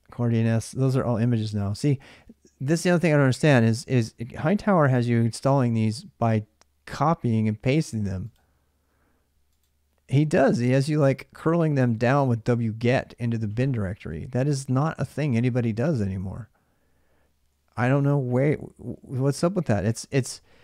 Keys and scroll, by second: 4.8 super+Tab, 13.8 super+Tab.